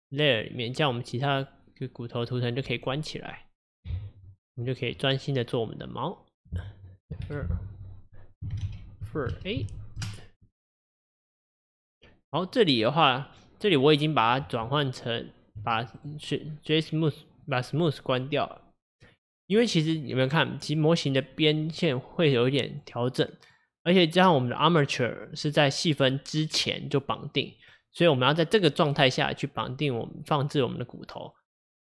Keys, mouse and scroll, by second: 2.3-3.7 scroll, 3.7 click, 5.0 scroll up 1, 7.3 F2, 14.7 Tab, 16.0 click, 17.5 click, 19.1 click, 19.9 click, 20.4 click, 20.7 click, 21.1 click, 21.4 click, 21.9 click, 22.2 click, 22.8 click, 23.5 click, 23.9 click, 27.7 click.